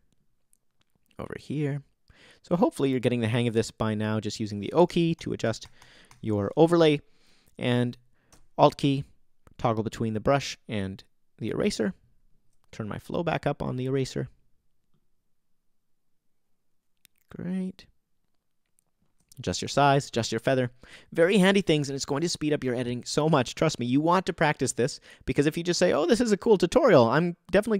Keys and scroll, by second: 4.9 o.